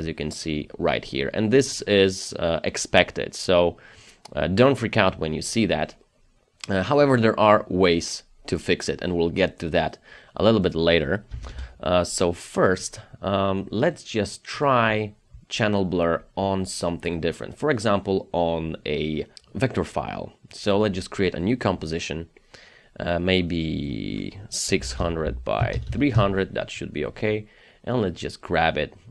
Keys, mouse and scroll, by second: 0.0-1.5 scroll up 1, 11.3 KP_0, 11.5 Return, 24.7 KP_6, 24.9 KP_0, 25.3 Tab, 25.6 KP_3, 25.8 KP_0, 26.1 Return.